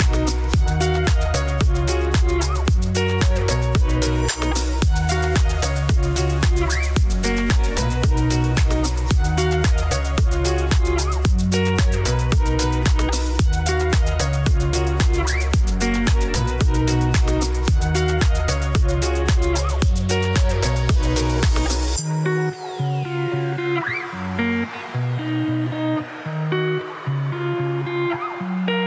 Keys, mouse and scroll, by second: 0.9-2.2 middle drag, 3.0 click, 3.2 3, 3.4 click, 3.6 middle click, 3.8 g, 4.7 middle click, 5.6 click, 5.8 shift+s, 6.1 Tab, 6.2 shift+a, 6.9 middle click, 7.0 Tab, 7.1 s, 8.5 Tab, 8.6 g, 9.6 middle click, 10.0 Tab, 10.1 s, 12.2-13.4 middle drag, 14.5 Tab, 14.7 middle click, 15.5 click, 16.2 shift+s, 16.5 Tab, 16.8 Tab, 16.9 shift+a, 17.6 Tab, 17.7 g, 20.3 middle click, 20.6 s, 22.1 middle click, 22.5 g, 23.5 middle click, 24.2 s, 25.6 middle click, 25.9 e, 26.5 Tab, 26.9-28.0 drag, 28.1 click, 28.3-28.8 middle drag.